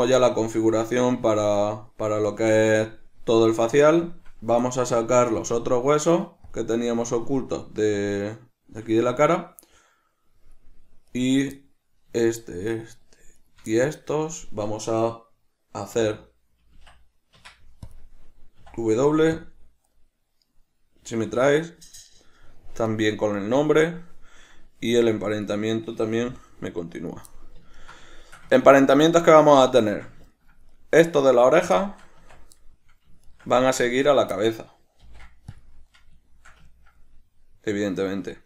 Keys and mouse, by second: 5.5 click, 6.6 drag, 8.1 shift+click, 9.2-11.3 middle drag, 11.3 right click, 11.7-12.3 middle drag, 12.3 shift+right drag, 12.7 shift+right click, 13.1 shift+right drag, 13.5 shift+right click, 13.9-23.1 middle drag, 16.1 w, 23.1 right click, 25.0 Tab, 25.6 right click, 26.4 g, 27.2 right click, 27.5-30.9 middle drag, 30.9 right click, 31.9-33.4 middle drag, 32.3 Tab, 33.4 shift+right click, 34.0 shift+right click, 34.5-38.4 middle drag, 35.2 ctrl+p.